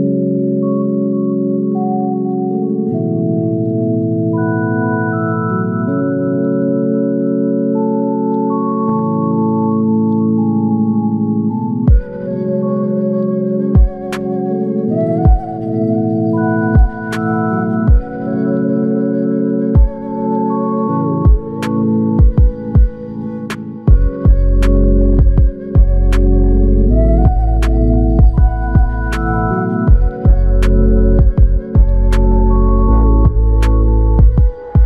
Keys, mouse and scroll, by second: 1.3 shift+click, 5.1 double click, 8.9 shift+click, 11.4 alt+click, 16.3 double click, 21.1 alt+click, 23.8 double click, 26.9 alt+click, 28.6 double click, 32.4 click, 32.6 alt+click, 34.1 double click.